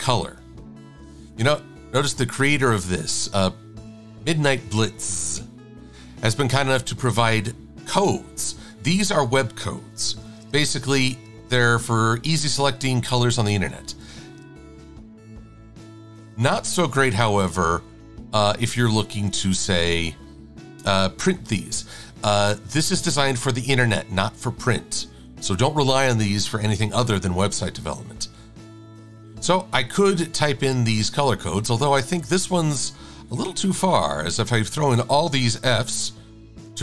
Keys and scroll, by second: 13.4 shift+d, 18.9 BackSpace.